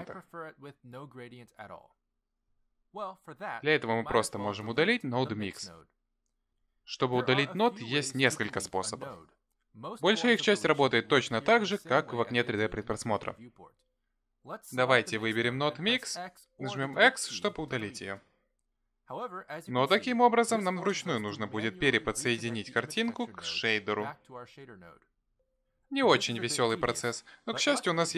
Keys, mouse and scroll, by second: 0.0 m, 1.1 m, 15.1 click, 17.2 Delete, 22.6 click.